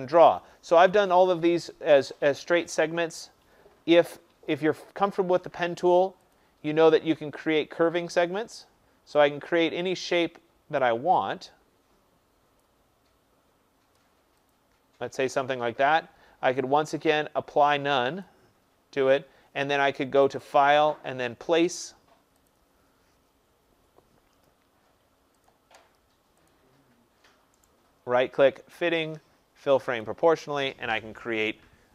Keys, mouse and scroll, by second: 0.3 click, 6.3 click, 8.6 click, 10.0 click, 12.5 click, 14.4 click, 18.2 click, 20.3 click, 22.4 click, 26.4 click, 27.6 right click, 30.0 click.